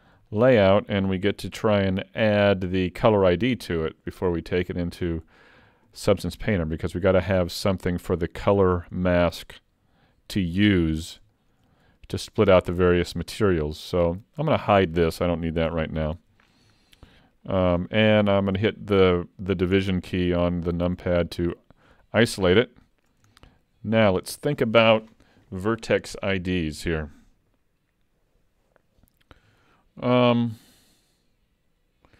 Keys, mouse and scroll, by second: 0.3 shift+middle click, 1.3 ctrl+s, 2.0 middle click, 3.8-4.2 scroll down 3, 4.4 shift+middle click, 6.6 middle click, 9.0 middle click, 10.9 scroll up 1, 11.3 shift+middle click, 11.7 middle click, 14.4 click, 15.7 h, 16.8 shift+middle click, 17.2 middle click, 17.7 click, 19.8 KP_Divide, 20.9-21.3 scroll up 3, 21.3 middle click, 23.3 shift+middle click, 29.6 shift+middle click.